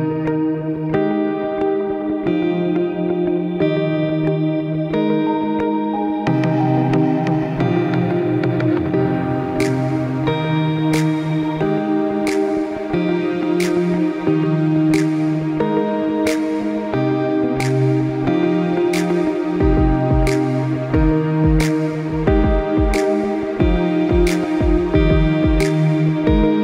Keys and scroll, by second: 4.2 ctrl+=, 4.9 ctrl+space, 23.3 ctrl+i.